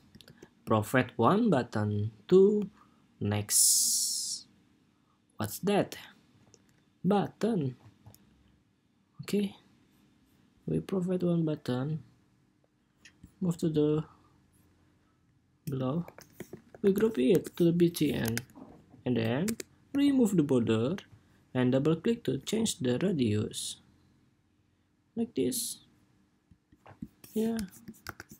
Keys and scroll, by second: 15.7 super+g, 16.1 super+r, 17.9 super+=, 27.9 super+-.